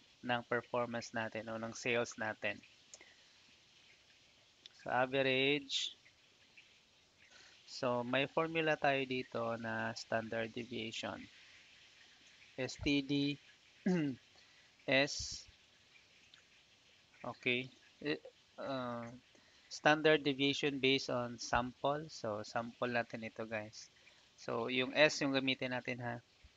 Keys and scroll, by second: 0.2 a, 0.7 v, 2.5 Down, 2.8 Tab, 5.8 ctrl+shift+Down, 7.3 Return, 9.5 =, 10.0 s, 11.3 t, 13.2 Down.